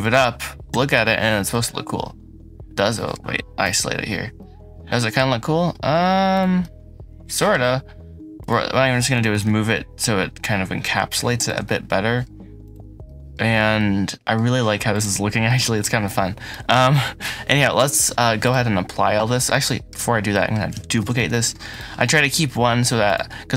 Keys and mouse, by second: 0.5 KP_Decimal, 1.3-3.0 drag, 9.0 g, 9.2 z, 11.5-12.1 drag, 11.9 middle click, 12.5 click, 12.9 middle click, 19.5 middle click, 20.2 middle click, 20.9 shift+d, 21.2 z, 22.9 click.